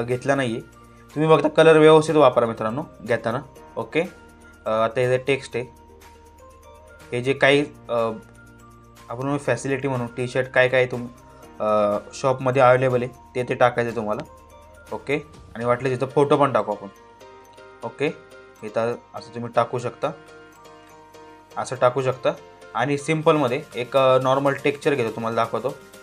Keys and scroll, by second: 13.5 ctrl+t.